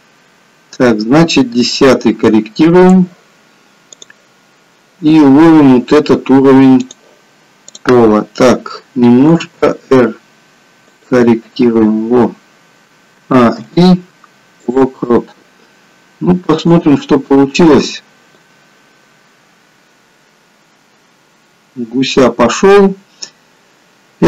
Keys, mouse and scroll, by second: 0.1 click, 4.0 click, 6.7 click, 7.7 click, 9.2 r, 13.1 a, 13.5 i, 16.6 click, 18.5 click.